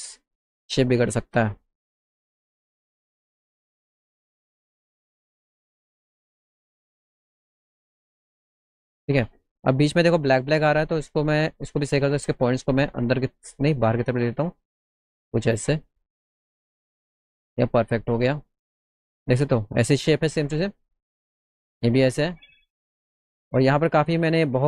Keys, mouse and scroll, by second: 0.8 middle click, 1.0 middle click, 1.4 middle click, 2.3 alt+middle click, 2.6-3.8 alt+middle drag, 4.0 middle click, 4.2 middle click, 5.3-9.0 drag, 12.0 click, 13.1 click, 14.2-17.0 drag, 17.6 alt+middle click, 18.5 middle click, 22.5 alt+middle click, 23.3 middle click, 23.8 middle click.